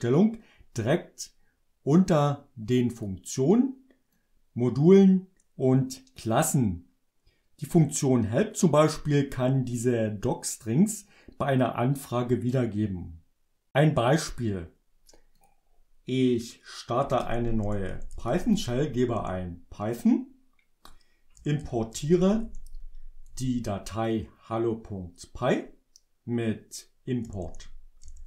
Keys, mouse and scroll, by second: 2.1-3.3 drag, 4.3 click, 15.5 click, 16.9-18.9 typing, 19.3 Return, 21.5-23.5 typing, 27.1-28.2 typing.